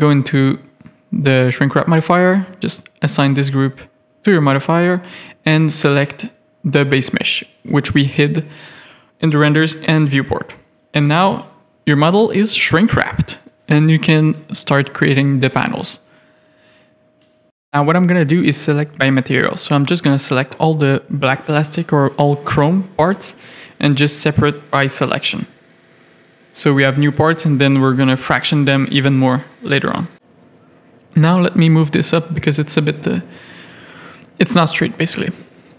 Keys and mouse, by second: 0.4 click, 1.3-3.3 drag, 4.3 click, 7.5 click, 8.0 middle click, 8.7 click, 9.6 KP_3, 12.4 click, 13.3 Tab, 14.2 click, 16.6-18.2 drag, 19.8 click, 20.7 click, 21.6 z, 23.0-24.4 middle drag, 26.1 z, 26.9 z, 28.0 KP_3, 30.2 shift+middle click, 30.6 z, 30.9 a, 31.3 click, 32.1 z, 32.9 g, 35.3 click, 35.5 Tab.